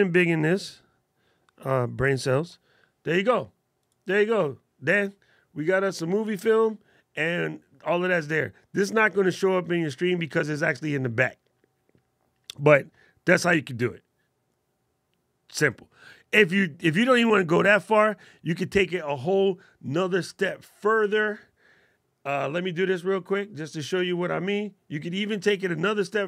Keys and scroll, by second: 2.3 alt+super+8.